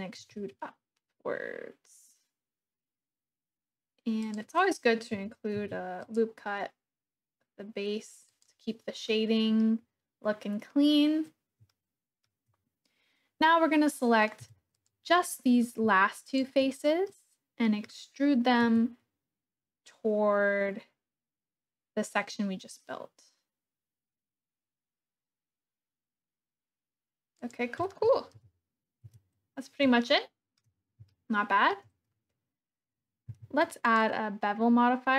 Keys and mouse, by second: 0.1 e, 4.3 click, 5.5 ctrl+r, 8.2 click, 9.1 click, 11.7 shift+click, 14.4 3, 14.7 click, 15.1 click, 17.1 middle click, 18.7 e, 27.3 click, 28.4 KP_1, 29.0 Tab, 30.0 shift+click, 30.3 shift+middle click, 31.1 shift+click, 33.2 q.